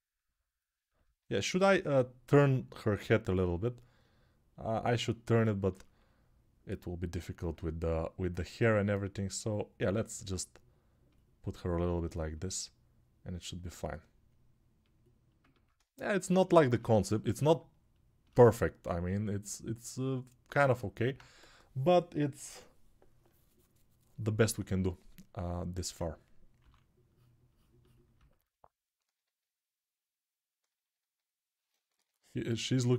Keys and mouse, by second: 0.8-27.9 alt+drag, 26.4 3, 31.7 1.